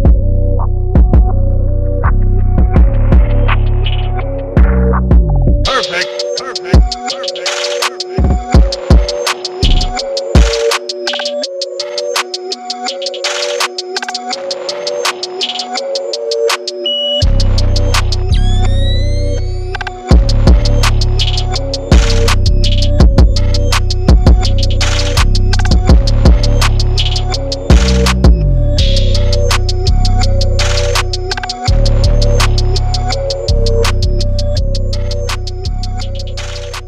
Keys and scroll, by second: 1.3 super+1, 1.9-2.8 typing, 3.9-5.1 typing, 6.0 shift+Right, 6.1 super+0, 6.4 super+1, 6.5 super+=, 6.9 super+t, 7.1 Return, 7.2 super+-, 7.3 super+-, 7.3 super+=, 7.4 super+-, 7.6 Up, 8.1 super+1, 8.7 super+0, 9.0 shift+Page_Down, 9.1 shift+Page_Down, 9.2 shift+Page_Up, 9.4 super+-, 9.4 super+-, 9.9 super+0, 10.6 super+1, 11.1 Return, 11.1-13.5 typing, 12.6 super+0, 13.7 shift+Right, 13.9 super+=, 14.1 super+=, 14.5 super+Down, 14.6 super+Down, 14.7 super+Right, 15.0 super+Right, 15.0 super+0, 15.2 super+-, 15.5 super+0, 19.7 super+a, 19.8 super+d, 19.9 super+1, 20.5 super+c, 20.9 super+v, 21.4 BackSpace, 21.5 super+a, 21.7 super+d, 21.9 super+0, 22.6 super+a, 22.7 super+d, 22.9 super+1, 23.1 super+0, 23.2 super+-, 23.5 super+-, 23.5 super+0, 23.6 super+=, 24.4 super+0, 24.5 super+-, 24.6 super+a, 24.7 super+d, 24.8 super+1, 25.2 super+0, 25.4 super+-, 25.6 super+g, 25.8 typing, 26.0 alt+super+e, 26.1 super+a, 26.6 super+d, 26.9 super+d, 27.4 BackSpace, 27.7 super+=, 27.8 super+0, 27.9 super+-, 27.9 super+1, 28.2 super+0, 28.3 super+-, 29.4-31.7 typing, 29.9 super+z, 31.9 Page_Up, 33.0 0, 33.6 super+-, 33.7 super+-, 33.8 super+1, 34.1 super+0, 34.1 super+-, 34.4 super+0, 34.5 super+=, 34.6 super+=, 34.6 super+0, 34.8 super+-, 35.7 super+j, 36.3 0, 36.4 0.